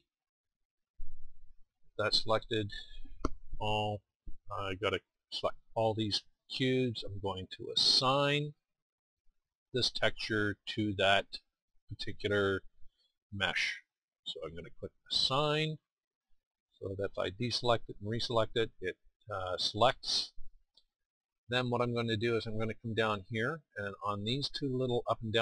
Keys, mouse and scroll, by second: 5.0 a.